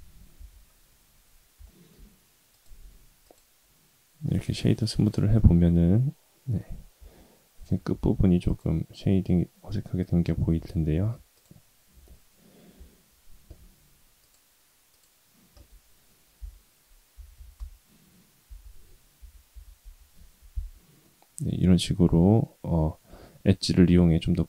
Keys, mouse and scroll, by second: 0.3 Tab, 1.6 shift+middle drag, 2.0-2.5 scroll up 3, 2.5-3.6 right drag, 3.6-4.1 scroll up 3, 4.1 scroll down 1, 4.5 shift+middle drag, 5.0-5.3 scroll up 1, 5.3-6.5 middle drag, 6.9 Tab, 7.9 ctrl+r, 10.5 Tab, 10.9 Tab, 11.3 click, 14.2 click, 14.9 click, 16.3 i, 18.4 i, 20.5 Tab, 21.0-22.4 middle drag, 22.5-23.9 scroll up 2, 23.9 middle click.